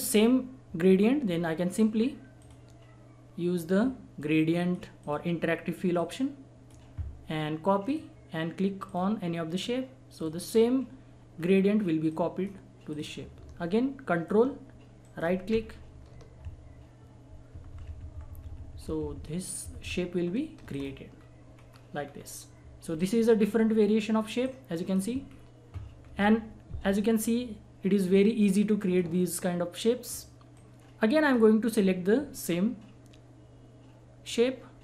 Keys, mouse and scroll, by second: 2.3 click, 4.5 click, 10.5-10.9 scroll down 1, 12.1 click, 14.2 ctrl+click, 15.0 ctrl+right click, 20.7 click, 21.1 scroll down 1, 23.0 click, 25.2 scroll up 1, 26.9 click, 28.9-30.4 scroll up 1, 30.5 click, 31.7 scroll up 1, 34.2-34.8 drag.